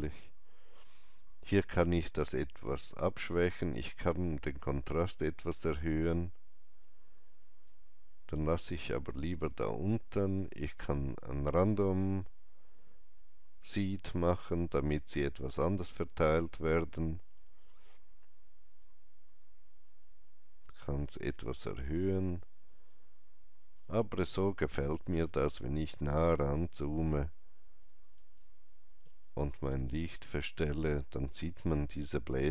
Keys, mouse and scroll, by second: 2.8-10.2 drag, 2.8-3.1 scroll down 1, 8.5 scroll down 1, 14.5 click, 14.5-16.7 scroll down 1, 18.7-26.4 drag, 24.9 alt+right click, 26.4-32.5 alt+drag, 28.3 alt+right click, 29.7 shift+right click.